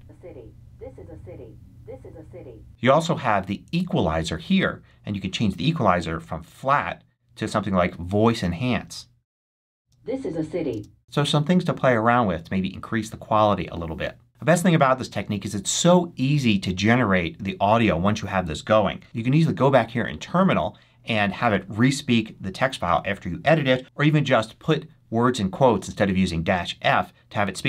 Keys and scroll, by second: 9.7 space, 23.8 BackSpace.